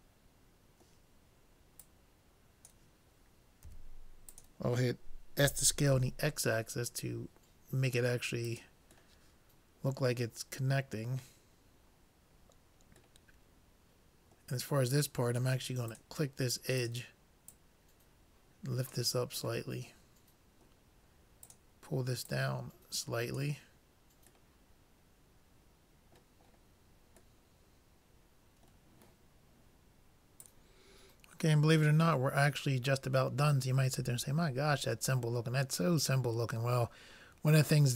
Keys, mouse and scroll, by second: 0.7-1.7 middle drag, 1.9-3.7 drag, 3.7 s, 5.5 s, 9.1-11.3 middle drag, 13.3-15.1 middle drag, 15.9-19.1 drag, 19.6-21.5 middle drag, 21.5-23.9 drag, 24.6 middle click, 27.7-29.1 middle drag, 33.9-35.8 middle drag.